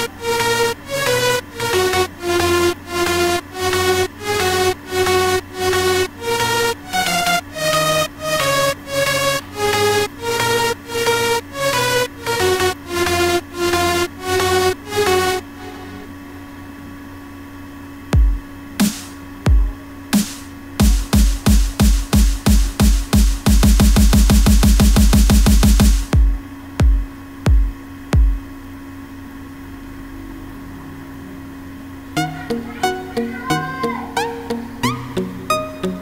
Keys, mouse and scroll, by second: 30.3 F1.